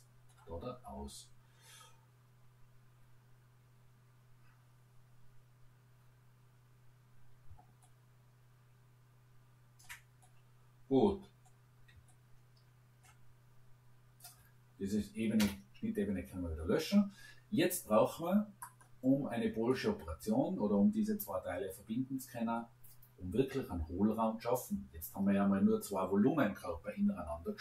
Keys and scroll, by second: 15.4 Delete.